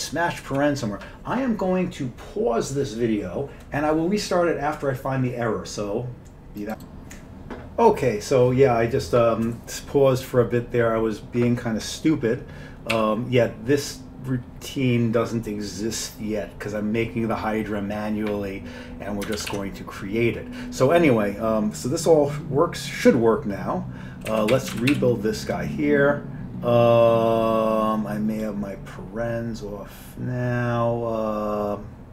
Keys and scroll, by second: 0.0 ctrl+n, 0.0 ctrl+g, 0.0 ctrl+p, 0.0 ctrl+b, 0.0 ctrl+x, 0.0 ctrl+e, 0.0 Up, 0.5 Up, 13.0 ;, 19.5 ctrl+x, 19.6 ctrl+s, 24.4 Down, 24.6 End, 25.0 ctrl+x, 25.0 ctrl+e.